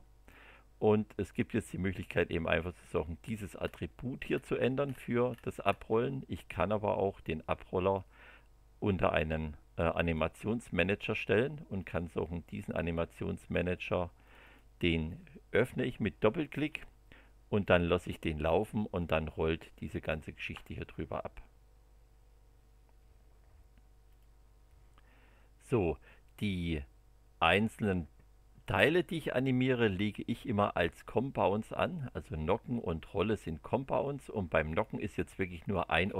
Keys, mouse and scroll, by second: 1.3 click, 2.8 click, 3.3 scroll down 2, 3.6 scroll up 2, 3.9 scroll down 2, 4.3 scroll up 2, 4.6 scroll down 2, 4.8 scroll up 2, 5.1 scroll down 2, 5.3 scroll up 1, 5.5 scroll down 1, 5.6 scroll up 1, 5.9 scroll down 1, 7.9-10.3 drag, 11.8 click, 14.3 click, 16.0 click, 17.5 click, 18.9-20.1 middle drag, 24.1 click, 28.7 middle click, 34.7 click, 35.6 click, 36.0 space.